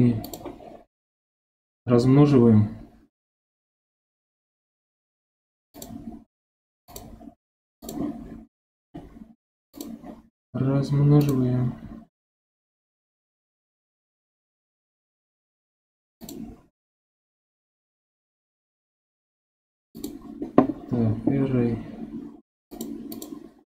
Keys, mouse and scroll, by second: 5.7-7.9 drag, 9.7 click, 16.2-19.3 drag, 22.7 click, 23.1 click.